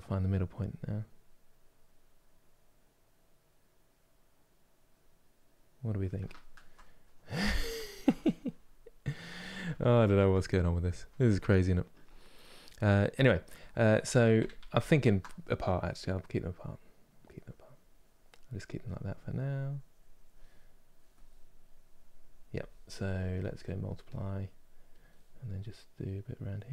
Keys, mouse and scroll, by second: 0.0 middle click, 0.6-3.6 drag, 6.0-14.3 ctrl+middle drag, 14.3 ctrl+z, 14.5 ctrl+z, 15.6-26.7 drag.